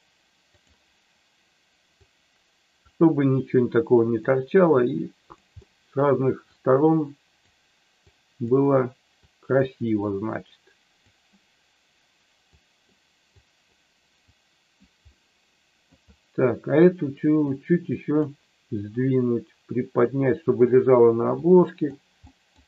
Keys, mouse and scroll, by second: 2.0 click, 3.4 click, 4.7 click, 5.5 middle click, 6.4-7.4 drag, 8.1 click, 9.3 click, 9.9-11.0 drag, 12.4 click, 13.3 click, 14.3 click, 15.2 middle click, 17.5 click, 19.0-20.6 drag, 21.4 click, 22.2 middle click.